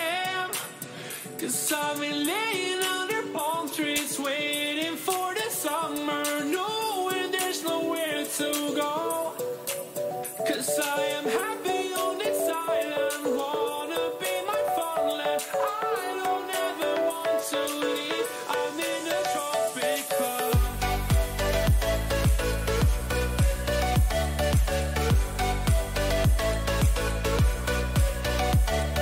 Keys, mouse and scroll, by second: 0.1 b, 1.7 g, 5.2 a, 6.7 b, 8.1 g, 11.3 g, 14.6 a, 16.3 b, 19.6 b, 21.0 e, 24.5 a, 25.6 b, 27.0 g.